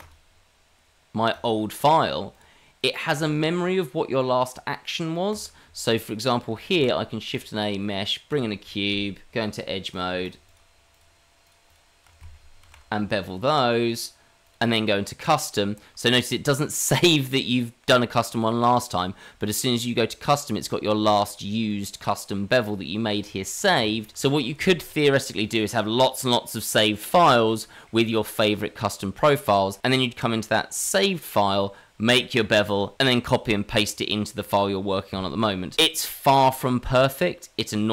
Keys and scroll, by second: 6.7 shift+a, 8.4 g, 8.7 a, 8.7 s, 8.9 s, 9.2 Tab, 12.6 ctrl+b, 23.8 Tab.